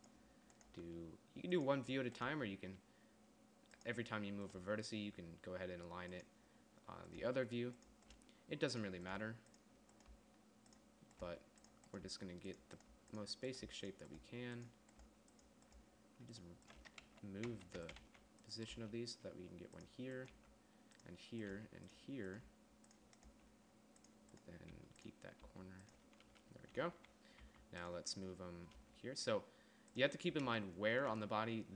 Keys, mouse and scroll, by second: 1.2 g, 2.8 g, 5.0 g, 7.7 g, 8.6 g, 9.6 g, 10.6 g, 11.7-14.7 typing, 16.3 g, 17.5 ctrl+z, 17.9 ctrl+z, 18.5 g, 19.3 g, 20.8 g, 22.0 g, 22.9 g, 23.8 g, 25.1 g, 25.9 g, 27.9 a, 29.2 g.